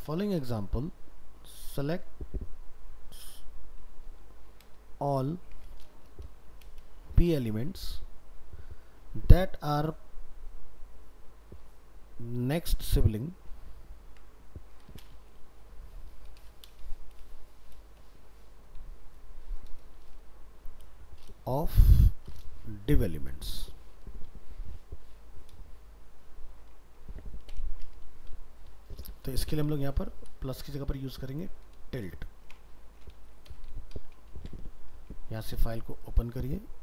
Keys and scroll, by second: 4.8 ctrl+shift+Right, 13.3 ctrl+shift+Right, 34.3 ctrl+s.